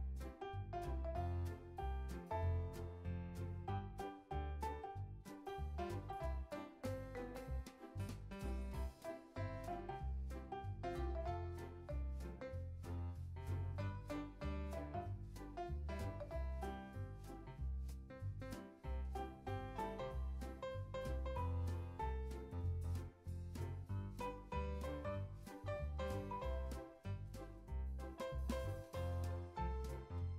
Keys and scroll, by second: 4.9 super+c, 5.1 super+v, 7.5 super+c, 8.6 super+v, 11.9 super+s, 22.5 super+s, 23.1 super+c, 23.3 z, 23.8 super+v, 24.2 x, 25.3 super+v, 29.8 z.